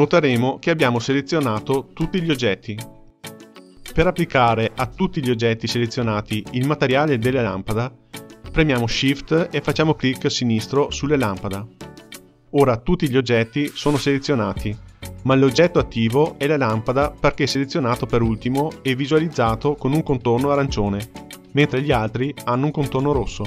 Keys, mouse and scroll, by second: 9.9 shift+click.